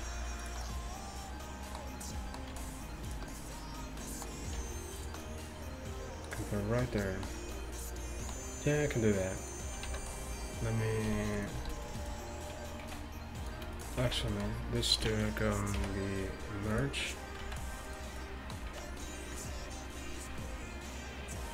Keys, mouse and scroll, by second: 2.6 g, 4.6 r, 9.4-14.5 right drag, 10.0 c, 11.1 c, 11.6 c, 12.9 z, 14.1 z, 15.8 alt+m, 17.5 z, 18.8 z.